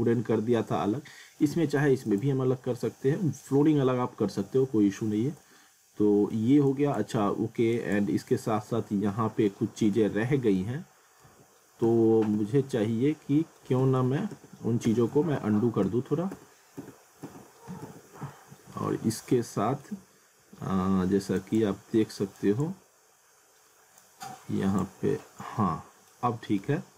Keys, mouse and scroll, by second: 0.2 scroll down 1, 1.4 middle click, 2.1 click, 2.5 scroll down 1, 3.0 middle click, 5.1-5.4 scroll up 1, 5.5 alt+middle click, 6.7 click, 8.3 scroll down 1, 8.6 alt+middle click, 10.0 ctrl+z, 18.3 middle click, 19.1 scroll up 1, 19.3 middle click, 21.4 ctrl+click, 22.9 scroll down 1, 24.0 click, 25.2 alt+middle click, 26.6 z.